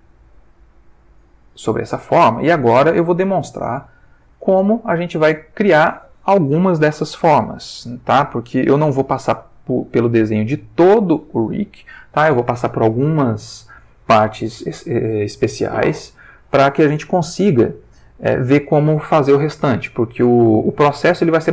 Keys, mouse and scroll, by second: 1.0-2.6 drag, 3.8 ctrl+s, 4.4-5.7 ctrl+middle drag.